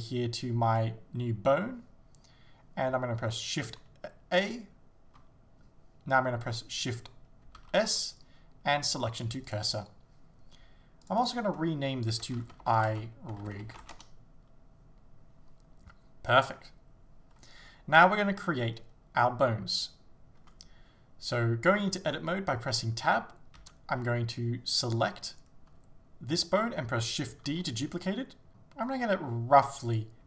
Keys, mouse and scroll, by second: 9.6 shift+s, 11.1 click, 13.0-28.5 drag, 14.1 Return, 20.4 Tab, 23.6 a, 27.5 shift+d, 30.0 click.